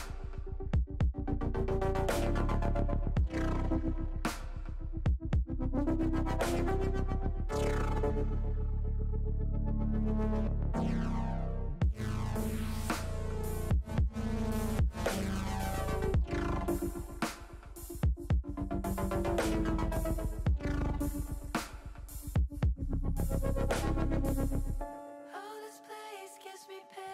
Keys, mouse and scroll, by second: 0.1 ctrl+z, 2.1 ctrl+z, 3.5 ctrl+shift+z, 3.8 ctrl+shift+z, 4.9 s, 6.4 click, 6.7 ctrl+z, 7.5 e, 8.0 s, 9.1 click, 9.4 ctrl+z, 10.3 e, 11.7 click, 13.3 e, 14.1 click, 15.2 middle click, 16.1-17.1 middle drag, 18.3 middle click, 19.3 middle click, 20.2 click, 21.0 shift+click, 22.0 KP_7, 23.6 click, 24.7 ctrl+z, 25.7 click, 26.8 click.